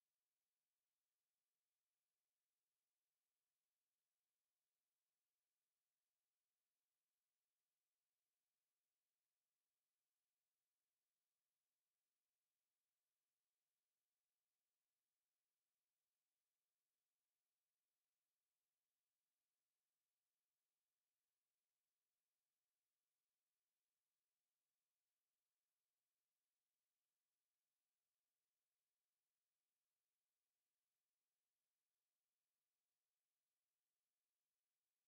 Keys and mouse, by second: 0.7 right click, 1.8 ctrl+z, 2.3 click, 2.6 ctrl+z, 2.9 ctrl+z, 3.0 ctrl+z, 3.8 alt+middle click, 4.5 alt+click, 5.0 ctrl+z, 5.1 ctrl+z, 5.5 ctrl+z, 5.9 right click, 7.1 click, 7.6 w, 8.4 click, 11.7 right click, 13.9 shift+click, 14.4 shift+right click, 14.8 shift+right click, 18.0 ctrl+click, 19.3 click, 20.6 click, 22.0 click, 22.4 click, 24.2 alt+right click, 24.5 alt+click, 26.0 alt+click, 27.2 alt+middle click, 28.0 alt+click, 29.1 alt+click, 30.6 click, 31.4 alt+click, 32.0 alt+click, 33.5 alt+h, 34.3 ctrl+z, 34.6 right click, 34.8 right click.